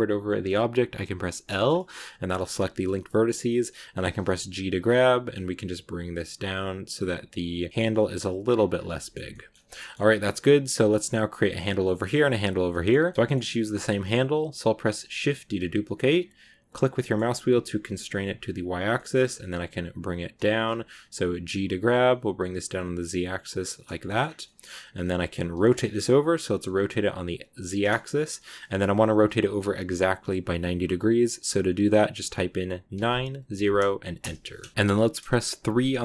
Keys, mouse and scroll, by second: 1.1 l, 1.3-1.8 scroll up 3, 1.3 middle click, 1.8 middle click, 3.6 g, 8.3 scroll down 5, 8.4 scroll up 1, 8.6-8.9 scroll down 2, 8.9 shift+middle click, 9.6-10.0 scroll down 3, 9.6 shift+middle click, 10.0 middle click, 10.6-11.8 scroll up 2, 11.8-18.0 middle drag, 18.8 shift+middle click, 19.0-20.2 scroll up 2, 20.2 g, 23.9 shift+middle click, 24.1-24.9 scroll up 4, 24.3 middle click, 24.9 middle click, 25.4 r, 34.7 middle click, 35.6 KP_3.